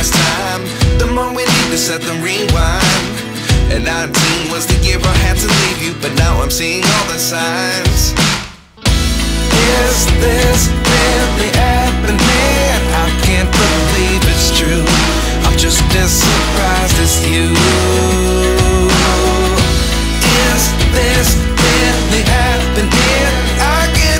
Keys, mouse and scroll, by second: 0.5 Tab, 1.9 a, 3.2 f, 4.2 Tab, 4.7-6.9 right drag, 6.9 KP_0, 7.2 Tab, 7.3-8.4 right drag, 8.4 Tab, 9.1 a, 9.8 f, 10.3 Tab, 10.6-11.7 right drag, 11.7 click, 11.9-12.6 middle drag, 12.6 click, 14.1 KP_7, 14.6-15.8 scroll down 2, 15.8 g, 18.5 g, 20.3 KP_0, 21.3 ctrl+s, 22.1 g.